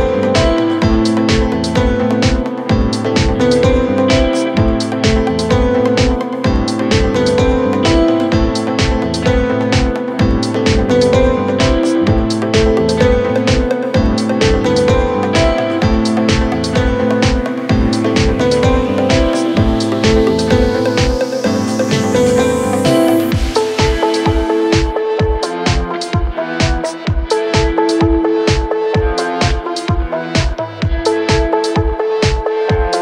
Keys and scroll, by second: 6.3 shift+F2, 16.2 F3, 18.9 Escape, 19.6 Delete, 20.3 F3, 21.6 Escape, 22.1 shift+F2, 22.3 Escape.